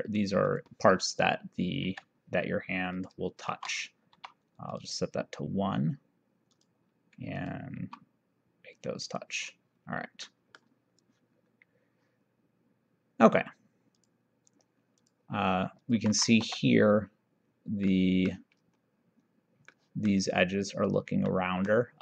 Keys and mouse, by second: 1.9 Escape, 3.0 click, 3.6 shift+r, 4.3 1, 4.7 click, 6.6 click, 7.8 c, 9.2 click, 10.4 middle click, 14.0 click, 16.2 v, 16.5 6, 18.0 middle click, 19.8 middle click, 21.4 middle click.